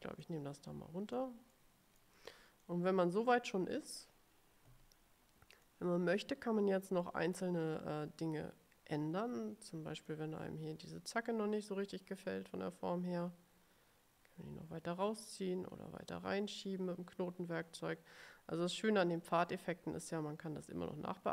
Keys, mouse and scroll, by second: 0.3-1.5 drag, 1.7 middle click, 2.8-4.3 drag, 5.7 click, 10.2-21.3 drag.